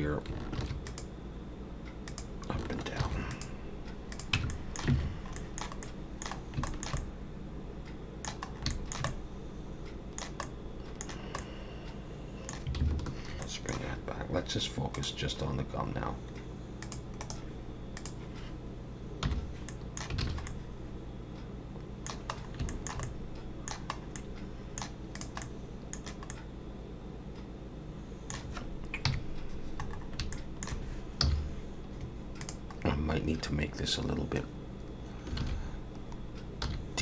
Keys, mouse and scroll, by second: 0.6 ctrl+r, 3.0 ctrl+r, 4.3 Tab, 4.5 middle click, 4.9 alt+a, 5.1 scroll down 2, 5.3 middle click, 5.8 middle click, 6.4 scroll down 2, 6.7 shift+middle click, 7.0 middle click, 8.5 scroll up 2, 8.7 shift+middle click, 9.1 middle click, 10.4 middle click, 11.4 middle click, 13.3 scroll down 2, 13.3 /, 13.4 middle click, 14.9 click, 16.1-16.5 scroll down 2, 16.8 click, 17.2 right click, 19.2 /, 19.7 middle click, 20.2 alt+a, 20.5 middle click, 22.3 scroll up 2, 22.7 shift+middle click, 23.0 middle click, 24.0 scroll up 1, 24.2 middle click, 25.1 click, 25.4 middle click, 26.3 middle click, 29.1 KP_3, 29.9 scroll up 3, 30.3 shift+middle click, 31.2 z, 32.8 scroll up 2, 33.8-34.3 scroll down 1, 35.4 alt+a, 36.6 z.